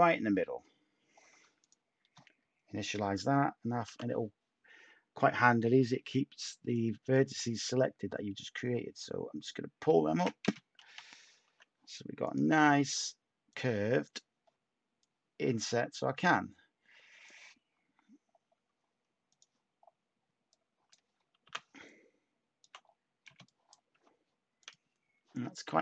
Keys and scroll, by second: 3.8 t, 10.8 /, 11.4 Tab, 18.5 Tab, 21.4 t, 23.2 Tab, 25.6 a.